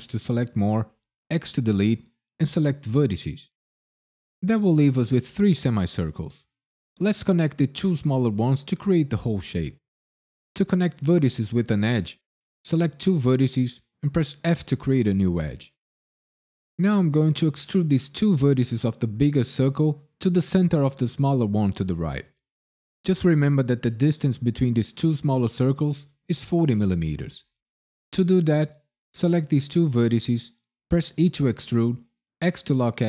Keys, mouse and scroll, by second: 1.3 x, 11.6 click, 14.4 f, 17.5 click, 19.9 f, 28.2 click, 29.6 shift+click, 29.9 shift+click, 31.1 e, 32.4 x.